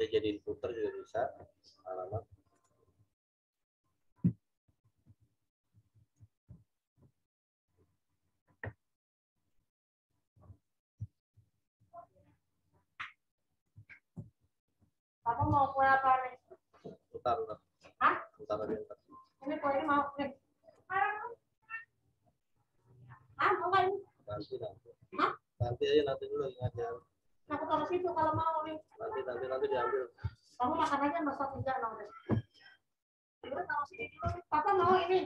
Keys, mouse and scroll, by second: 2.0 z, 2.5 click, 2.9 t, 3.7 click, 4.6 shift+a, 4.9 l, 5.9 space, 9.1 click, 11.3 ctrl+t, 12.2 alt+shift+click, 14.1 Return, 16.9 right click, 17.4 click, 18.1 right click, 18.6 click, 22.2 Left, 23.1 Up, 23.5 Right, 24.4 Up, 25.5 Down, 28.1 Right, 30.2 Down.